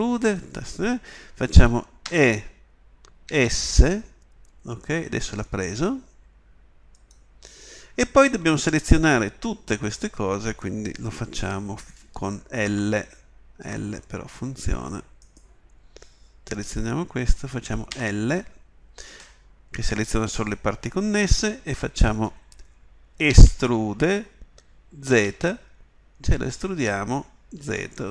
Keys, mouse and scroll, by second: 2.1 e, 12.7 l, 13.6 l, 17.1 l, 17.9 l, 23.3 e.